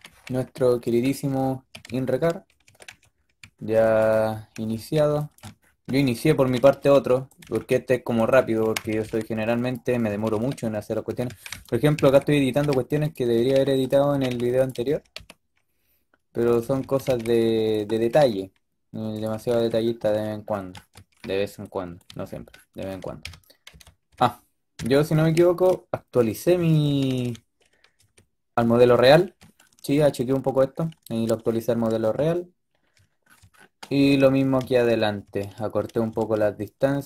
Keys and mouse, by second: 2.5 a, 2.8 a, 4.4 a, 4.6 a, 4.8 b, 6.3-8.9 typing, 10.0-14.8 typing, 16.5-17.9 typing, 19.1 a, 19.1 click, 19.3 a, 19.4 a, 23.1 KP_1, 23.6 KP_3, 23.9 KP_5, 24.6 KP_5, 26.5 a, 26.7 a, 27.9 z, 33.8 middle click, 34.7 middle click.